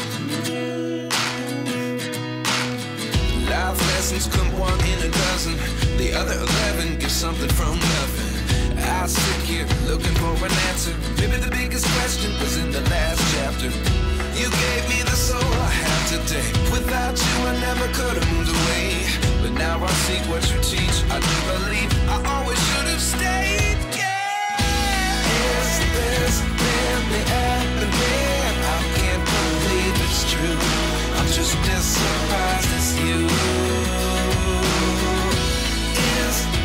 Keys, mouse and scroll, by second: 0.2 click, 0.2 g, 0.6 ctrl+z, 0.8 click, 1.2 click, 1.5 g, 1.8 middle click, 3.2 click, 3.6 click, 3.7 g, 4.0 middle click, 4.3 click, 4.7 click, 4.9 g, 5.6 middle click, 6.9 Tab, 7.6 Tab, 8.2 click, 8.9 shift+click, 9.4 shift+click, 9.6 g, 9.8 middle click, 10.4 click, 10.6 Tab, 11.4 Tab, 11.8 click, 13.2 g, 15.0 click, 15.6 click, 15.8 middle click, 16.1 g, 17.9 middle click, 18.2 click, 19.5 middle click, 19.7 Tab, 20.4 Tab, 20.8 click, 21.0 g, 24.3 click, 24.4 g, 24.9 click, 25.0 Tab, 25.5 Tab, 26.0 click, 26.2 g, 26.6 click, 26.7 g, 27.7 click, 27.8 Tab, 28.6 click, 30.0 click, 31.7 click, 32.4 click, 33.5 g, 33.7 middle click, 34.1 click, 34.1 g, 34.3 middle click, 34.8 click, 35.5 click.